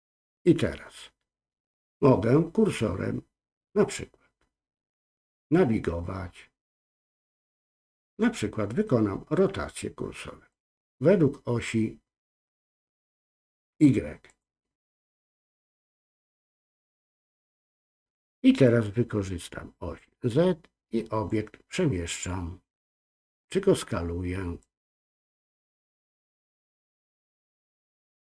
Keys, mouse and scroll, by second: 10.5-13.5 drag, 14.2-16.6 drag, 19.9-21.2 drag, 24.6 click, 24.7-27.1 drag, 28.2 ctrl+z.